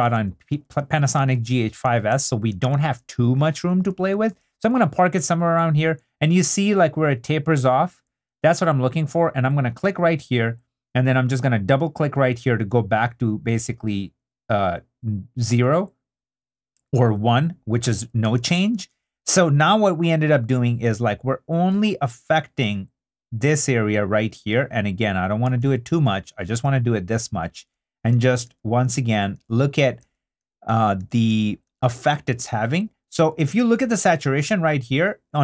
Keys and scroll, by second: 4.4 super+d, 18.4 super+d, 25.6 super+d, 32.2 super+i, 33.1 super+i.